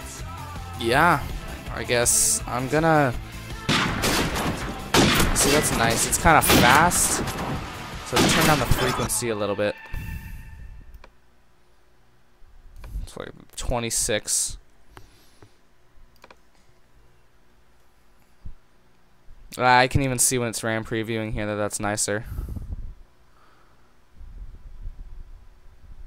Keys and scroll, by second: 13.7 ctrl+0.